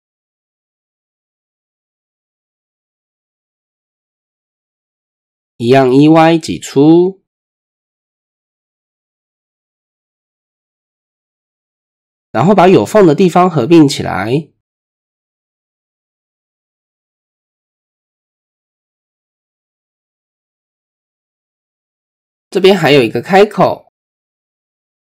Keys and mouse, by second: 0.0 click, 0.5 shift+click, 2.6 middle click, 3.7 middle click, 5.2 KP_3, 6.4 e, 8.9 click, 9.7-10.1 shift+drag, 10.6-11.0 drag, 13.0-14.4 middle drag, 14.9 shift+middle click, 16.9 m, 18.6 middle click, 19.3 shift+middle click, 20.8-21.1 shift+middle drag, 21.3-21.9 middle drag, 22.0 shift+middle click, 23.3 shift+middle click, 23.9 middle click, 24.6 shift+middle click.